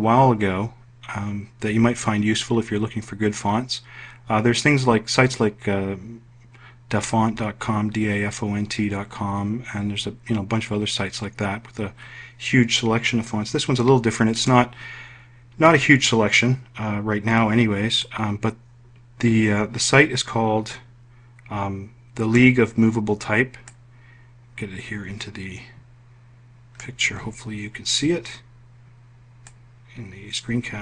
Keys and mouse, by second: 23.2 click.